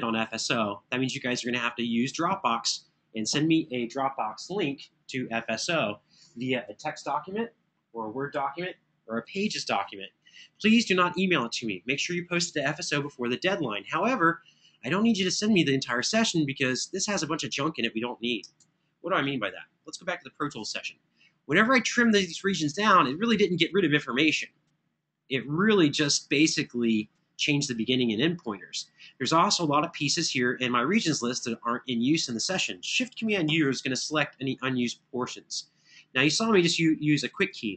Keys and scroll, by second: 18.3 super+Tab, 33.2 super+u.